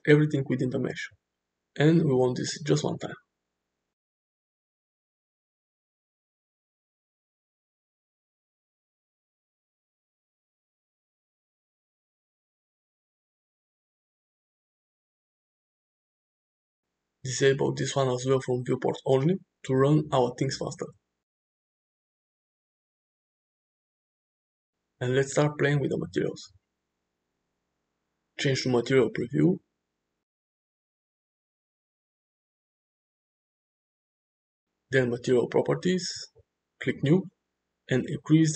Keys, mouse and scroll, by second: 2.7 click, 4.5-5.4 middle drag, 8.1-9.9 middle drag, 10.4 shift+middle drag, 10.9-12.7 middle drag, 13.7-14.7 middle drag, 17.5 click, 19.8 space, 20.5-21.3 middle drag, 21.8-22.7 middle drag, 23.3 middle click, 25.7 space, 29.0 click, 29.9-30.3 middle drag, 30.7 click, 31.7 click, 32.4-32.9 shift+middle drag, 36.3-36.6 drag.